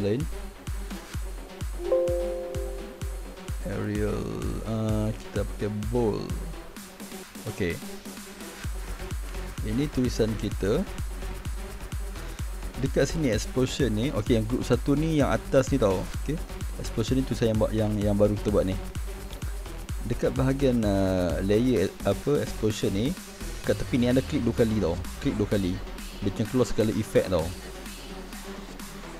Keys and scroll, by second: 0.0-1.5 typing.